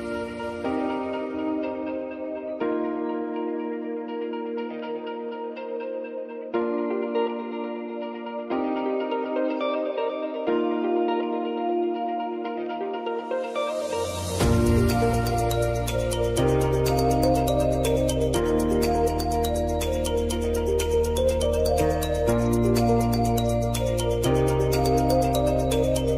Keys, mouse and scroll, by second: 0.5 F4, 2.4 ctrl+a, 2.8 click, 5.7 [, 6.2 space, 8.6-9.9 drag, 13.8-19.5 drag, 19.5 space, 23.0 v, 23.6-25.1 drag, 25.1 space.